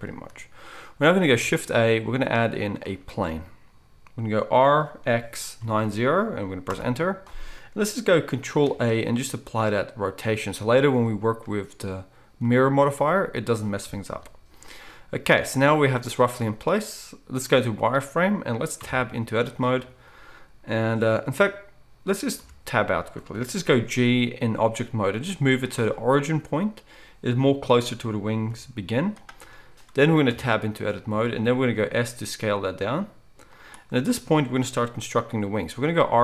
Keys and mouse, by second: 1.4 shift+a, 4.5 r, 8.6 ctrl+a, 14.1 KP_1, 16.0 z, 18.9 Tab, 22.4 Tab, 23.9 g, 25.7-36.2 middle drag, 28.4 g, 30.3 Tab, 31.7 s, 35.8 r.